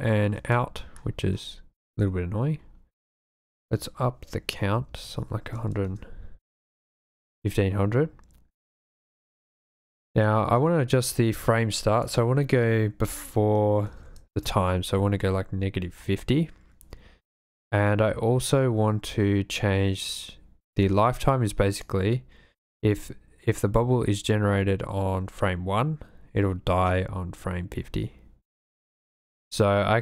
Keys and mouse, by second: 0.4 space, 3.2-5.9 drag, 12.1-14.4 drag, 21.8-28.7 drag.